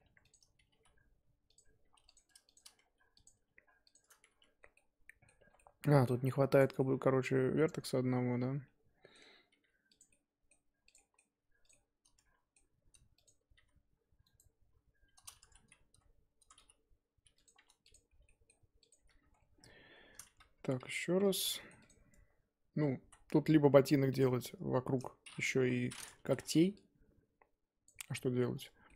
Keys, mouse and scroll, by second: 0.0 1, 0.2 click, 0.7 g, 1.9 2, 2.0 click, 3.2 click, 3.9 shift+click, 4.3 f, 4.7 middle click, 5.4 1, 5.6-6.6 middle drag, 6.6 click, 6.8-9.5 middle drag, 9.5 g, 10.1 middle click, 10.9 click, 10.9 middle click, 11.3 g, 11.7-13.2 middle drag, 13.2 click, 13.6 g, 15.4 a, 15.9 n, 16.4 n, 17.4 m, 17.5 2, 17.9 click, 18.1 f, 18.2 middle click, 18.9 click, 18.9 f, 19.3 scroll down 1, 19.6 Tab, 20.7 alt+h, 21.4 middle click, 21.8 click, 22.1 Tab, 22.5 a, 23.0 s, 24.2-25.6 middle drag, 25.6 KP_3, 26.3 z, 26.4 1, 27.8 click, 28.5 scroll up 1, 28.5 middle click.